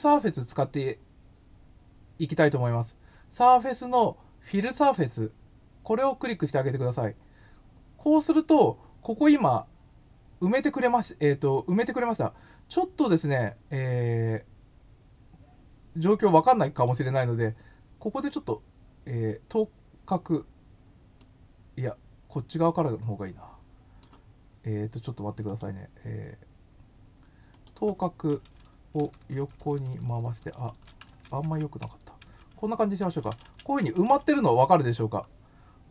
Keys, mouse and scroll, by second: 6.0 click, 16.7 click, 18.2 click, 21.1-24.0 middle drag, 25.4 click, 27.5 click, 35.7 scroll up 1.